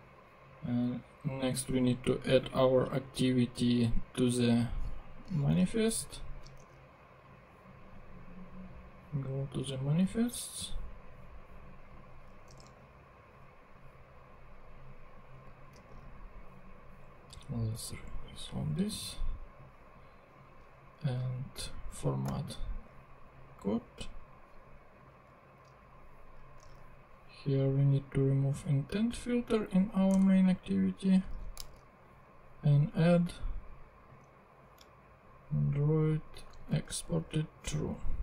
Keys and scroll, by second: 6.3 super+c, 6.7 super+Tab, 12.4 Return, 12.7 super+v, 15.7 super+r, 22.3 alt+super+l, 25.6 super+Tab, 30.1 BackSpace, 31.2 super+BackSpace, 31.3 super+x, 31.7 super+Tab, 36.5 super+c, 37.2 super+Tab.